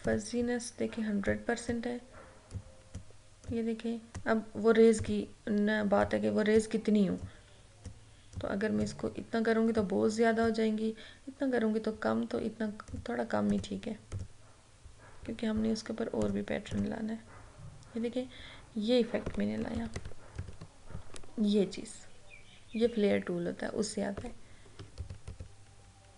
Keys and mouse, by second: 19.8 ctrl+=, 24.9 ctrl+=, 25.1 ctrl+-.